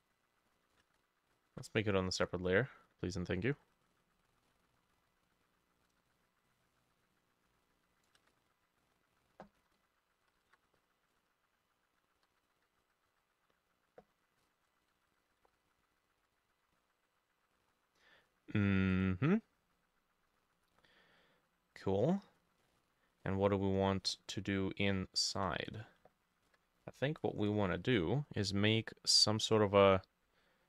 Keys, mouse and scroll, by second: 1.0 v, 1.4 ctrl+middle click, 1.5 ctrl+z, 4.5-6.8 drag, 4.5-5.9 v, 6.0-8.4 shift+middle drag, 8.3 v, 9.6 t, 10.3 Right, 10.3 click, 10.4 Right, 10.5 Right, 10.7 ctrl+middle click, 11.2 shift+Right, 12.2 Right, 12.4 Right, 12.5 Right, 12.6 Right, 12.8 Left, 13.1 Down, 14.4 ctrl+j, 14.9 shift+Down, 14.9 ctrl+j, 15.0 shift+Down, 15.1 shift+Down, 15.3 shift+Down, 15.4 shift+Down, 15.5 shift+Down, 15.6 shift+Down, 15.7 shift+Down, 16.0 shift+Down, 16.1 shift+Down, 16.2 shift+Down, 16.4 shift+Down, 16.6 shift+Down, 22.4 scroll up 1, 22.6 middle click, 23.3 middle click, 24.1 middle click, 25.7 double click, 26.5 ctrl+j.